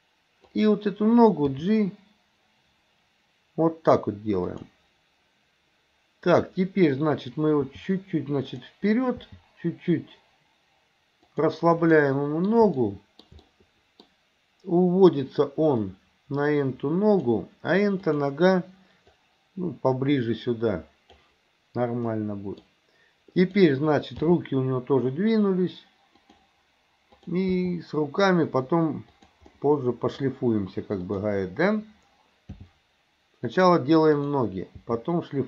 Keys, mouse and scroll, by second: 0.5 click, 1.5 g, 6.3 click, 7.7 g, 9.3 g, 12.0 middle click, 12.8-14.1 shift+middle drag, 15.8-17.4 drag, 18.0 click, 19.2-21.3 drag, 22.1 middle click, 23.4 click, 24.2 g, 27.1 click, 27.6 g, 29.6 middle click, 31.1 click, 32.6 g, 34.1 click, 34.8 g.